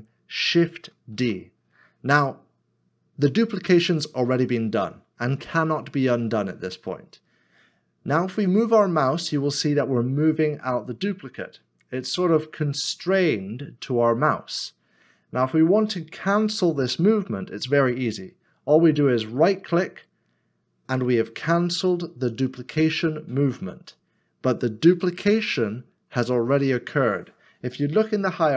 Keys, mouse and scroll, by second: 1.1 shift+d, 19.6 shift+d, 20.5 right click.